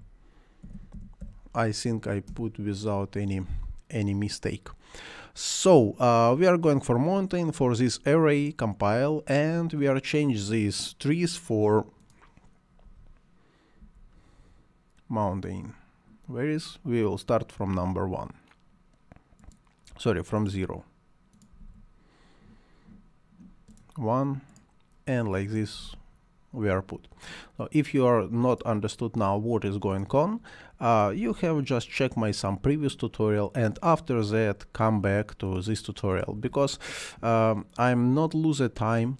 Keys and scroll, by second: 0.0-1.7 typing, 2.3 Return, 12.8 m, 13.8 o, 21.3-22.1 typing, 25.5-26.3 typing, 30.8-31.7 typing, 36.1-36.9 typing.